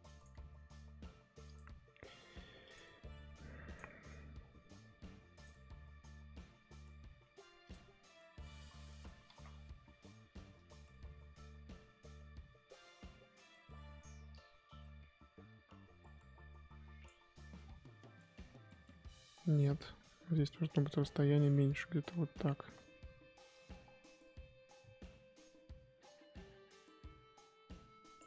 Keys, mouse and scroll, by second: 2.0 f, 3.2 f, 7.1 f, 8.5 click, 9.3 ctrl+z, 9.5 scroll down 1, 9.8-11.0 scroll up 1, 11.0-17.6 drag, 17.6-18.3 scroll down 4, 19.0-21.3 scroll up 2, 21.3 click, 22.2 ctrl+z, 22.4 scroll up 1, 22.6 ctrl+z, 23.7-28.2 drag.